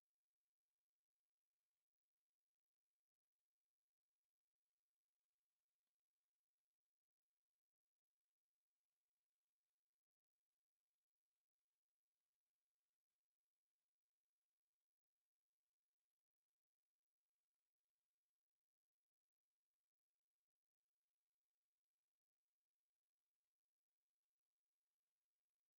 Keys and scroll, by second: 2.2 Escape, 3.0 F8, 3.4 Escape, 3.8 m, 3.9 space, 5.3 Escape, 14.5 Escape, 14.7 KP_Multiply, 14.9 4, 15.1 Return, 24.2 m, 24.3 space, 25.0 F8.